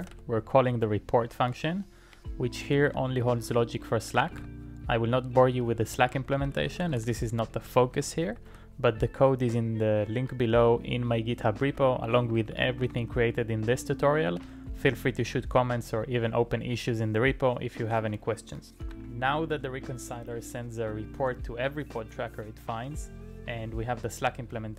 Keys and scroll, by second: 0.0-4.4 typing, 5.5-9.1 typing, 11.4-14.4 typing, 18.8 alt+m.